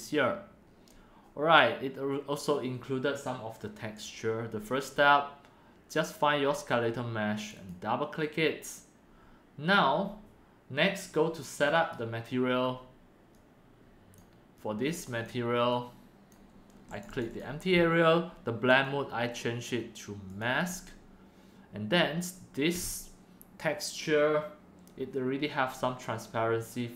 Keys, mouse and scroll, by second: 4.1 click, 4.9 click, 6.5 click, 6.8 click, 7.3 click, 7.5 click, 11.5 click, 11.7 click, 12.3 click, 14.1 click, 16.9 click, 17.2 click, 17.3 click, 18.8-19.3 drag.